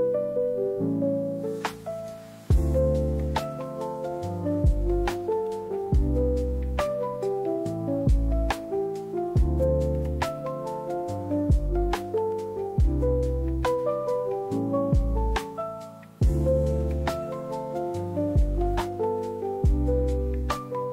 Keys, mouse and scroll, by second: 0.4 shift+a, 2.1 Tab, 2.6 right click, 3.4 right click, 3.8 right click, 4.3 Tab, 4.7 Tab, 5.2 3, 5.4 click, 6.0 shift+click, 9.3 click, 9.9 click, 10.6-13.8 drag, 12.2 d, 13.9-16.5 drag, 18.7 click, 19.0 click.